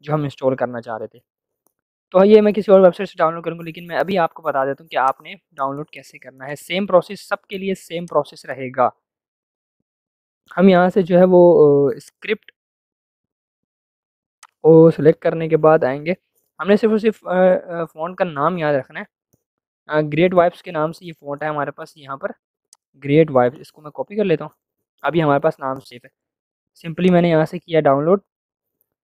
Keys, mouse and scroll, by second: 5.0 click, 8.0-12.0 drag, 14.4-26.2 drag, 24.4 ctrl+c, 26.2 ctrl+c, 27.0 click.